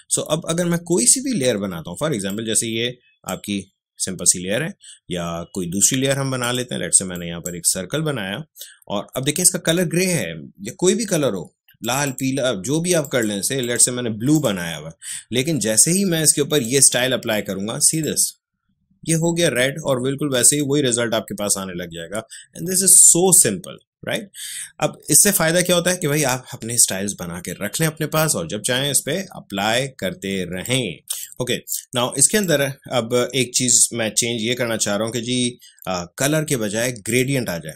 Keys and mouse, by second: 2.2-11.8 drag, 20.4 click, 30.6 click, 31.2-37.0 drag.